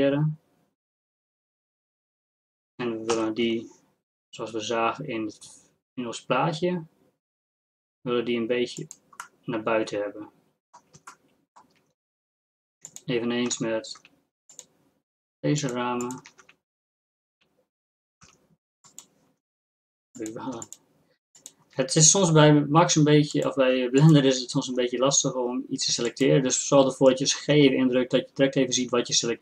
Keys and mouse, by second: 3.2 g, 9.5-12.9 drag, 13.6 z, 14.1 z, 16.4 z, 17.5 z, 18.7 g, 20.2 click, 21.8-29.4 drag, 22.6 g, 25.1 g.